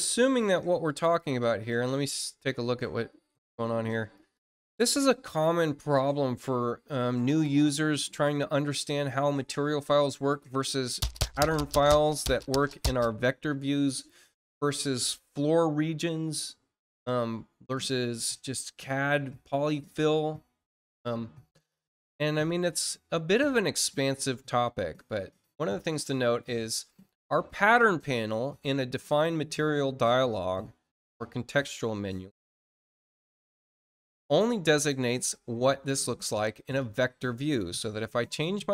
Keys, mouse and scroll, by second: 1.1 click, 4.1 click, 10.6 click, 11.7 click, 25.8 click, 29.3 click, 36.7 click.